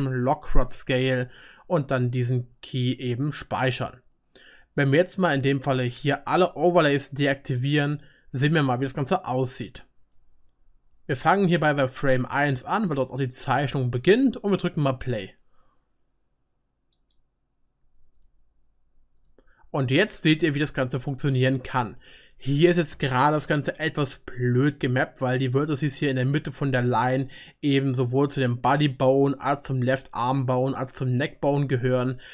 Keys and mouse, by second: 2.0-6.8 middle drag, 6.8 click, 7.3-9.3 middle drag, 9.1-17.1 drag, 18.3-19.2 drag, 20.6-32.3 drag, 20.6-32.3 middle drag, 20.6-32.3 right drag.